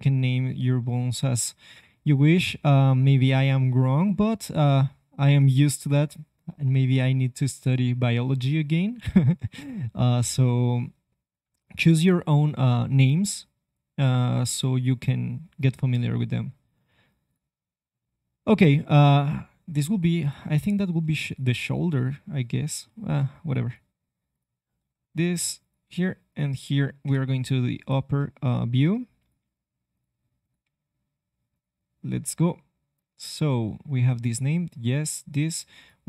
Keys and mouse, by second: 17.2-19.2 drag, 19.2 g, 20.2-23.6 drag, 24.8 e, 25.8 e, 27.0 KP_7, 27.5 middle click, 27.8 middle click, 29.2 right click, 29.4 g, 30.6 g, 32.7-36.0 drag.